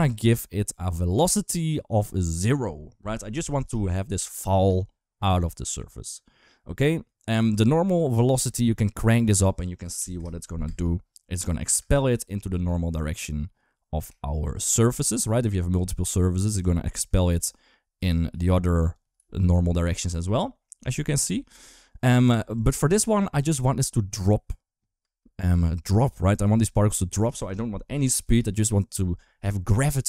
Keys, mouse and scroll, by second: 0.9 click, 2.2 click, 4.5 space, 8.2 space, 9.1 click, 10.5 space, 11.6 space, 12.3 space, 14.0 shift+middle drag, 16.4 Tab, 16.7 middle click, 17.0 2, 17.2 click, 17.8 e, 18.9 g, 19.9 Tab, 20.7 middle click, 21.3 ctrl+z, 21.4 ctrl+z, 21.8 ctrl+z, 22.3 Tab, 23.3 KP_1, 24.8 space, 27.3 click.